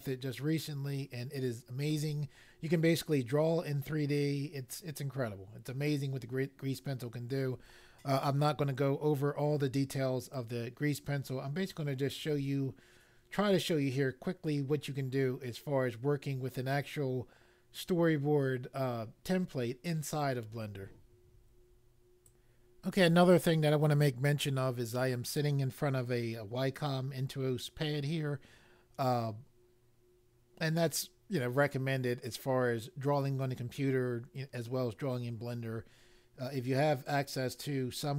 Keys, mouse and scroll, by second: 22.2 click.